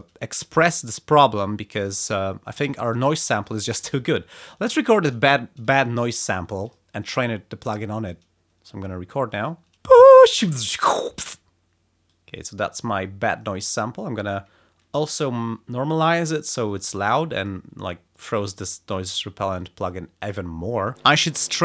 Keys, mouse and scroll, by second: 11.5 space, 12.1-13.8 drag, 14.1 click, 15.4 alt+3, 16.0 alt+click, 16.6 click, 18.2 click.